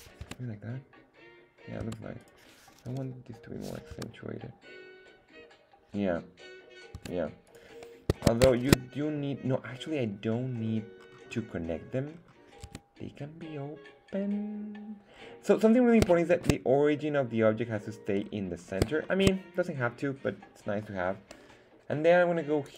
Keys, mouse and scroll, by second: 0.2 Tab, 1.8 Tab, 2.2 right click, 2.9 g, 3.6 click, 3.9 Tab, 6.9 Tab, 7.5 right click, 8.6 shift+right click, 10.6-11.0 scroll down 2, 11.0-11.6 scroll up 4, 12.1-12.7 scroll down 3, 12.6 Tab, 15.1 scroll down 2, 15.6-16.0 scroll up 4, 16.2 shift+middle drag, 18.2-18.8 scroll down 4, 19.1 shift+middle drag, 22.6 click.